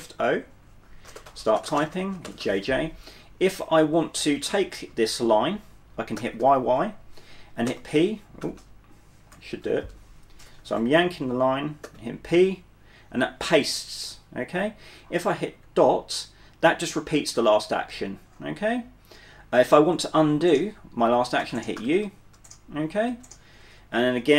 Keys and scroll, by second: 1.1-2.5 typing, 4.3 typing, 6.3 typing, 7.8-10.7 typing, 11.9 typing, 15.7 typing, 16.8-17.7 typing, 21.5-24.3 typing.